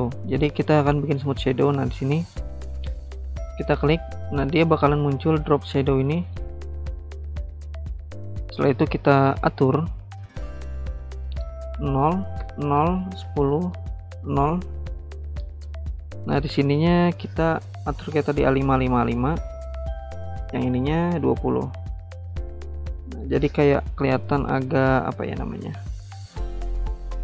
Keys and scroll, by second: 12.4-14.0 typing, 13.9 Tab, 17.6-18.9 typing, 20.5-21.3 typing, 21.8 Return.